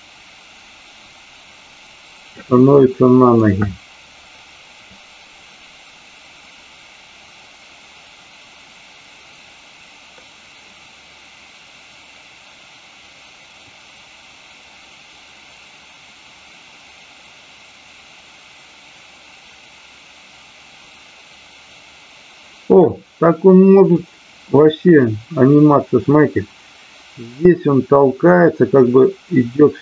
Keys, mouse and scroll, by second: 2.7-3.3 middle drag, 4.8-22.8 drag, 24.0-29.8 drag.